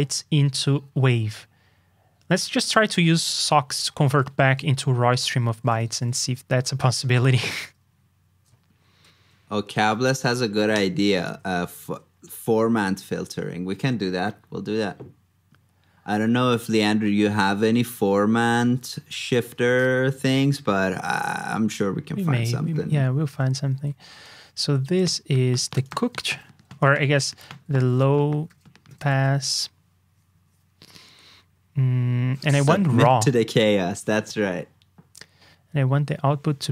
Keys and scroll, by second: 5.7 super+a, 6.1 super+c, 6.5 super+Tab, 10.3 alt+shift+Down, 17.9 super+v.